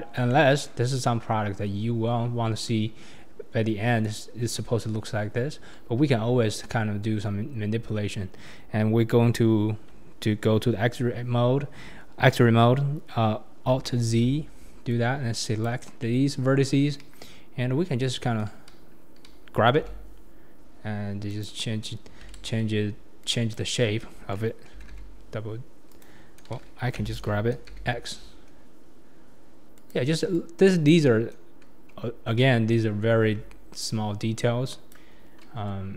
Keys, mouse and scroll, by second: 0.3-1.0 middle drag, 6.0 Tab, 14.0 alt+z, 14.9 click, 15.8 scroll down 2, 16.0-17.0 middle drag, 17.0 KP_1, 17.8 scroll up 3, 19.9 g, 22.4 ctrl+z, 23.2 click, 24.8 g, 26.9 g, 30.9 click, 33.3 g.